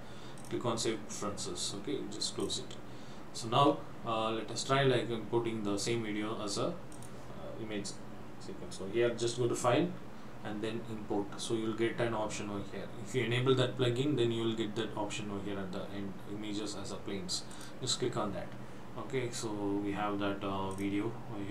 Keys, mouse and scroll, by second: 7.0 click, 20.8 click.